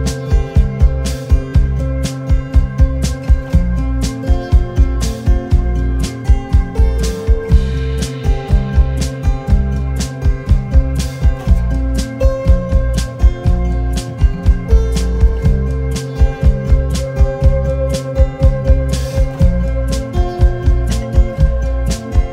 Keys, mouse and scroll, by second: 0.1 shift+click, 1.4 shift+click, 2.7 shift+click, 4.5 shift+click, 8.6 v, 9.2 alt+scroll down 1, 11.9 Delete, 12.3 space, 13.5 space, 18.8 ctrl+d, 19.3 double click.